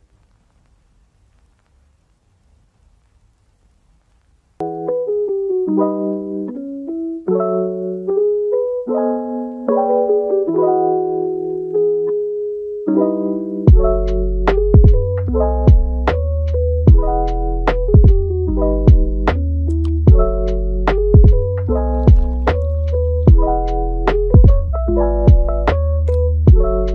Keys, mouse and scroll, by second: 1.4 Tab, 1.9 click, 2.7 KP_3, 3.6 g, 4.7 click, 5.0 g, 7.0 click, 7.4 g, 9.0 Tab, 10.0 shift+d, 11.4-12.5 middle drag, 12.5 g, 14.1 Tab, 15.1 Tab, 15.9 KP_3, 17.5 Tab, 19.4 click, 19.9 g, 20.8 click, 21.1 g, 21.9 drag, 22.3 g, 23.1 click, 23.4 g, 25.0 Tab, 25.3 scroll down 1, 25.6-26.9 middle drag.